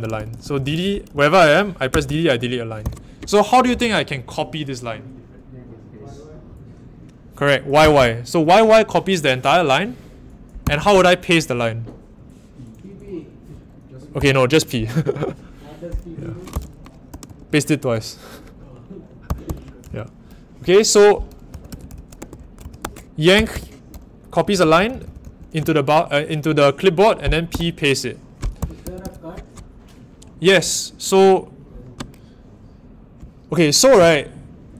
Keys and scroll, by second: 0.0-3.3 typing, 7.8 typing, 10.6 typing, 14.2 n, 17.1 typing, 19.0-25.7 typing, 27.5-29.4 typing.